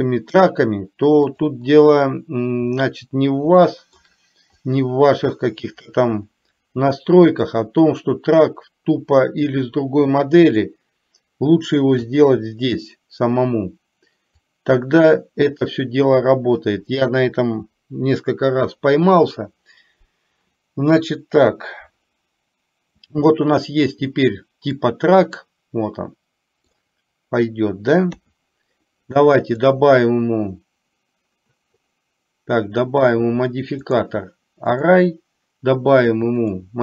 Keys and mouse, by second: 3.8 shift+middle click, 4.7-5.9 drag, 7.6-10.7 drag, 14.7-16.7 drag, 24.8-26.7 middle drag, 29.8-31.7 drag, 33.1 click, 33.9-35.1 drag, 36.4-36.8 drag.